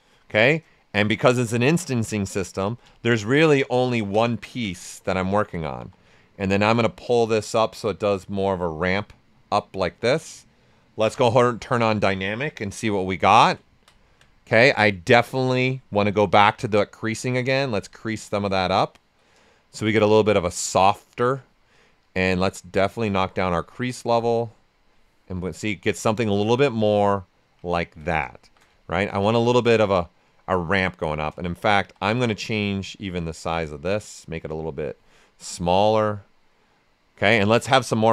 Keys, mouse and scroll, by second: 1.6 alt+right click, 2.2 ctrl+alt+right click, 2.6 ctrl+alt+click, 2.8 ctrl+space, 4.4 typing, 4.8 right click, 5.7 w, 6.2 ctrl+right click, 6.8-9.1 drag, 9.1-11.1 right drag, 11.1 d, 12.3-13.1 typing, 12.8 right click, 13.2 right click, 15.6 click, 18.1 right click, 19.7 shift+f, 20.2-22.0 right drag, 22.0-25.3 drag, 25.3 right click, 27.6 right click, 28.4 shift+f, 28.7 ctrl+right click, 29.0 ctrl+click, 29.7-31.2 right drag, 31.7 w, 32.1 ctrl+right click, 33.1-35.2 drag, 35.2-36.9 right drag.